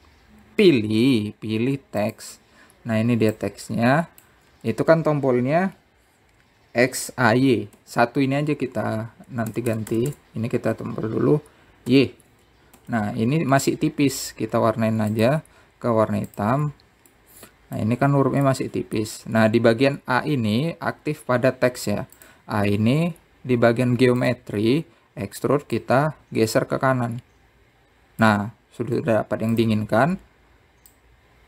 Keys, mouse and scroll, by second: 4.5 click, 9.0 Tab, 10.7 BackSpace, 10.9 BackSpace, 11.1 BackSpace, 11.3 BackSpace, 13.1 shift+y, 14.0 Tab, 16.3-18.4 drag, 18.4 middle click, 19.3 scroll up 2, 19.7-22.8 middle drag, 23.4 click, 24.5 click, 27.0 click, 28.8-29.8 drag.